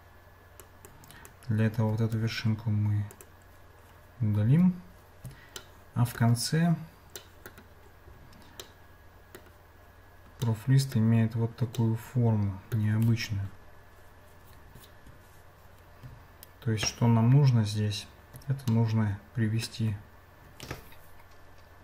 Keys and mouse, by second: 0.9 click, 2.2 x, 4.5 Tab, 5.6 shift+middle click, 7.4 middle click, 8.8 middle click, 10.4 middle click, 11.7-12.9 middle drag, 18.7-19.7 shift+middle drag.